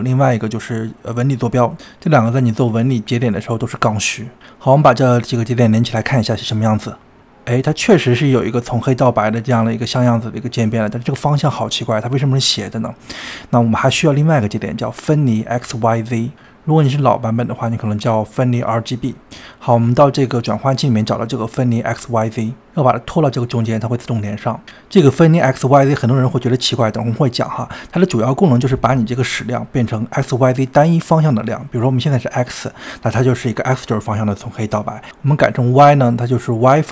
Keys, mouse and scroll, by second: 0.6 shift+middle click, 1.2 click, 1.6 shift+a, 4.8-6.0 middle drag, 6.0 drag, 6.9 click, 8.4-10.2 middle drag, 10.2 KP_1, 12.7 click, 13.8 drag, 15.2-19.8 middle drag, 19.8 click, 20.2 shift+a, 25.1-32.5 middle drag, 34.9 drag, 36.7-36.9 middle drag.